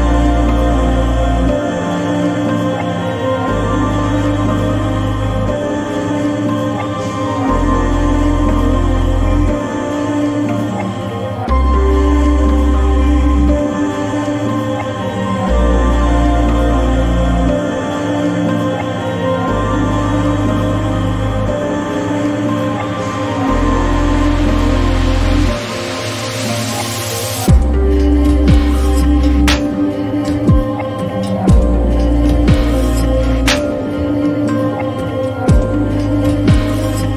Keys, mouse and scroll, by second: 1.5 space, 3.5 click, 6.5 right click, 13.1 click, 19.4 shift+Num_Lock, 19.4 click, 19.8 shift+s, 20.7 shift+i, 21.9 shift+d, 22.3 shift+e, 24.2 click, 27.9 ctrl+t, 32.3-37.1 drag.